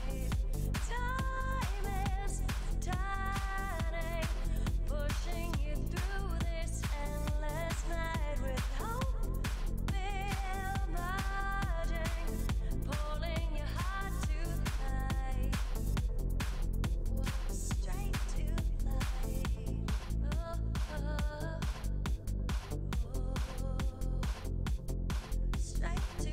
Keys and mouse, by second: 0.0 f, 1.6 w, 2.4 ctrl+Tab, 3.1 f, 5.2 w, 6.1 ctrl+Tab, 6.7 right click, 7.4 ctrl+Tab, 8.4 f, 9.8 f, 10.3 ctrl+Tab, 12.0 right click, 12.6 ctrl+Tab, 13.5 shift+e, 15.7 f, 17.3 ctrl+r, 18.6 f, 18.7 f, 19.7 f, 20.0 f, 20.7 f, 21.8 shift+e, 22.2 Tab, 23.2 Tab, 24.3 right click, 25.2 z, 25.7-26.3 right drag, 25.8 ctrl+Tab.